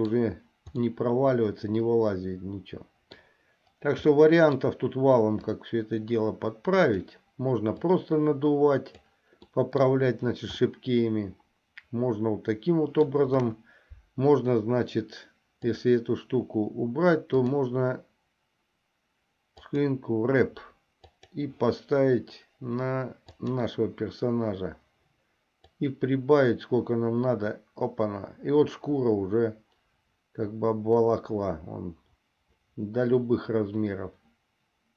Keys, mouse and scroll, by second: 1.2-3.5 middle drag, 4.4 middle click, 5.7-7.4 drag, 8.1-9.3 drag, 9.7 middle click, 10.8-13.3 middle drag, 13.6 KP_1, 16.0 click, 17.5-20.0 drag, 21.2 click, 25.9-34.9 drag.